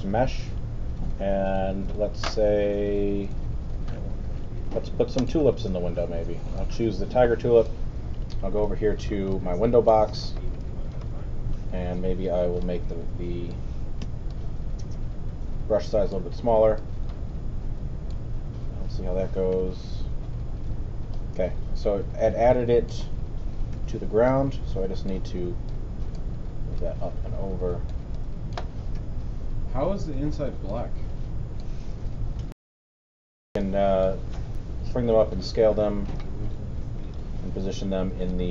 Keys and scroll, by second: 14.0 alt+b, 14.6 b, 19.5 4, 23.7 alt+w, 28.9 alt+5, 29.8 5, 32.6 super+., 33.5 alt+super+., 34.8 alt+r, 37.2 w.